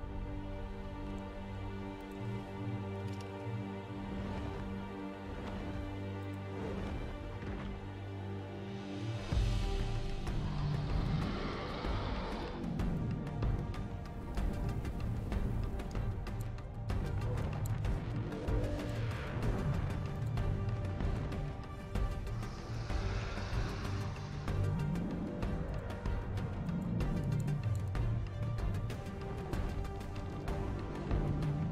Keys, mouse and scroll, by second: 1.1 scroll down 2, 2.1 click, 6.2 click, 13.0-16.4 alt+drag, 17.1 alt+scroll up 1, 17.4 alt+click, 18.8 click, 20.1 click, 25.7 click, 26.7 click, 27.2 click, 27.9-31.7 drag.